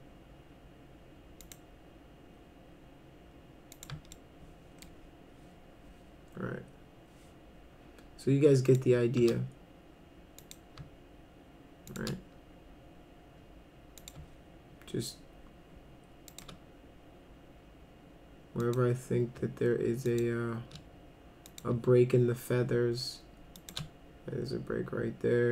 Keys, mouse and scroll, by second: 1.4 click, 3.8 click, 4.1 shift+middle click, 8.7 shift+click, 10.4 click, 11.9 shift+click, 14.0 click, 16.3 shift+click, 18.6 click, 20.1 shift+click, 21.5 click, 23.6 shift+click.